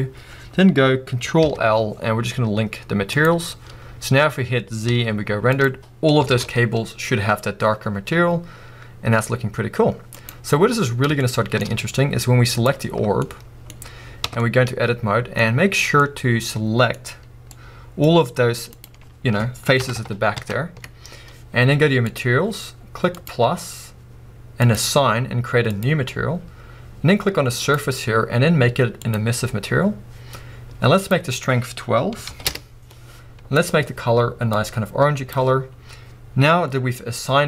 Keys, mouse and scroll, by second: 0.5-1.3 scroll up 1, 1.3-2.2 scroll up 1, 2.2 scroll up 1, 3.3 ctrl+l, 3.7 scroll down 2, 5.7 z, 6.8 a, 9.5 z, 10.7-11.2 scroll up 2, 11.7-12.6 scroll up 2, 12.6 scroll up 1, 12.7 click, 12.9 scroll down 2, 13.2-18.8 middle drag, 13.8 scroll up 2, 14.3 Tab, 15.7 scroll up 2, 16.9 scroll up 1, 18.8 click, 19.8 ctrl+KP_Add, 23.3-25.8 drag, 29.1 click, 31.2-34.5 drag, 32.7 Return, 35.6 scroll down 2.